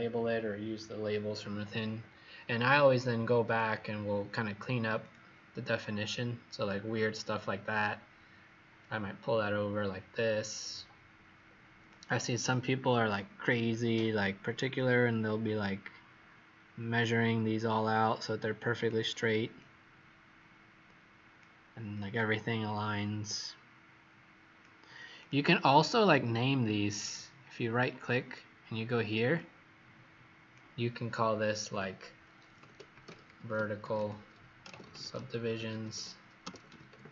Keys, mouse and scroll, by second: 6.7 scroll up 2, 7.6 click, 29.3 click, 32.3-37.1 typing.